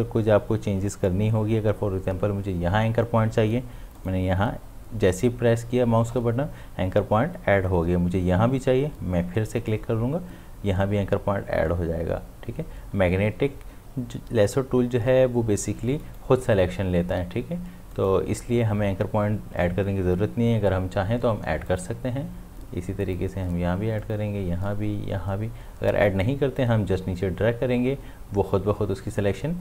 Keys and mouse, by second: 3.9 click, 4.0 click, 9.6 click, 16.0 click, 21.7 click.